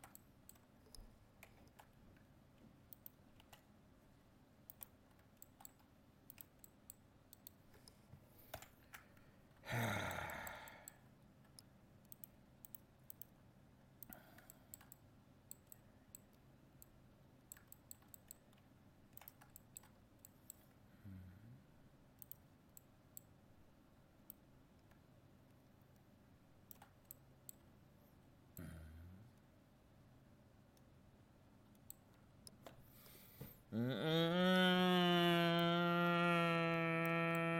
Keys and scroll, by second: 8.6 ctrl+l.